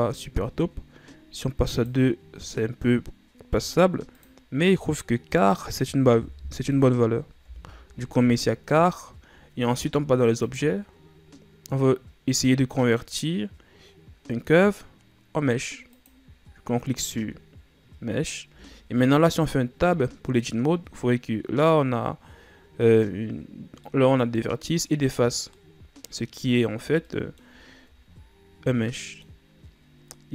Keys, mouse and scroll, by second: 1.9-8.6 drag, 10.5-13.6 drag, 18.6 Tab, 19.6-20.0 scroll down 1, 20.0-23.1 middle drag, 23.2-23.7 scroll up 1, 23.7 scroll down 1, 23.9-26.8 middle drag, 26.8-27.2 ctrl+scroll up 1, 27.2 middle click, 27.8-28.9 ctrl+scroll up 4, 28.9 scroll up 2, 29.0 middle click, 29.6-30.3 scroll up 1.